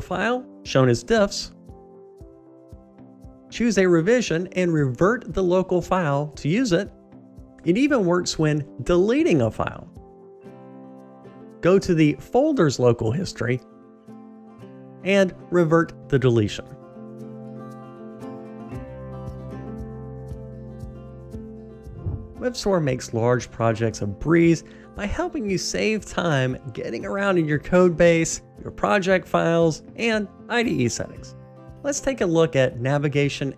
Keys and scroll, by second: 8.6 Delete.